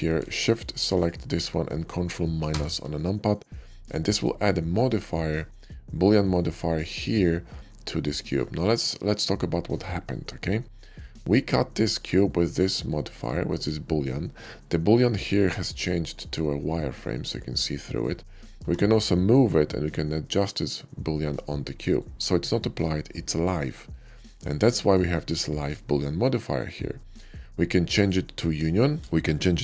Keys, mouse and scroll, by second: 0.8 shift+click, 2.4 ctrl+KP_Subtract, 3.8-4.1 middle drag, 4.6 click, 10.0-10.8 middle drag, 11.6 click, 12.1-12.5 middle drag, 12.9 shift+middle click, 13.4 shift+middle click, 14.5-17.9 shift+middle drag, 18.5 g, 21.8 right click, 22.1 middle click, 22.8-23.8 middle drag, 24.0 click, 24.7 shift+middle click, 26.8 shift+middle click, 27.1-27.9 shift+middle drag, 28.8 shift+click.